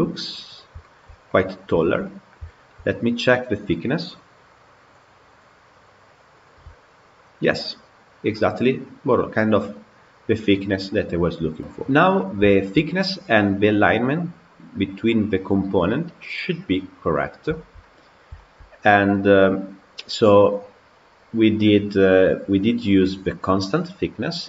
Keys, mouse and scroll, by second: 0.0-0.7 scroll up 7, 0.7-2.5 shift+middle drag, 4.3-5.3 drag, 5.8 click, 11.9 click, 12.3-18.7 shift+middle drag, 18.7 scroll down 1, 19.0-22.0 middle drag.